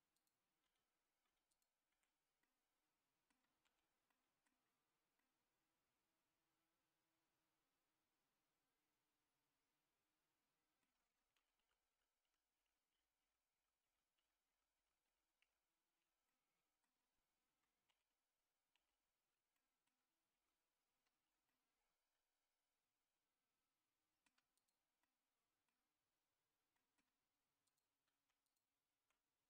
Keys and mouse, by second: 0.1 click, 0.6 Tab, 1.5 Tab, 1.5 click, 1.9 Tab, 2.4 middle click, 3.6 a, 4.1 middle click, 5.2-10.8 middle drag, 11.3 ctrl+z, 11.9 ctrl+z, 12.5 ctrl+z, 12.9 ctrl+z, 13.5 ctrl+z, 14.0 ctrl+z, 14.3 ctrl+z, 15.0 ctrl+z, 15.4 ctrl+z, 16.3 middle click, 18.3 ctrl+z, 19.0 ctrl+z, 19.5 middle click, 20.3 ctrl+z, 21.5-24.2 middle drag, 24.5 click, 25.0 middle click, 26.7 middle click, 28.4 shift+click.